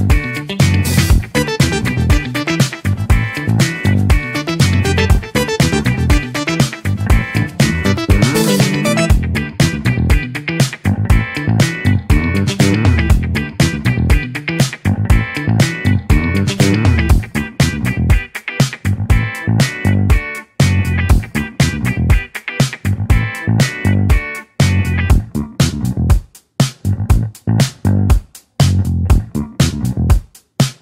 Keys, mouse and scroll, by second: 25.8 click, 27.1-27.9 drag, 30.1 click.